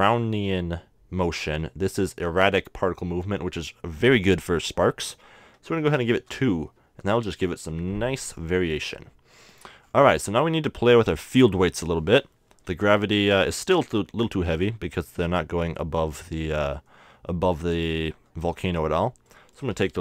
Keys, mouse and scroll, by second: 5.0-7.0 drag, 8.8 middle click, 11.6 middle click, 19.3-20.0 drag.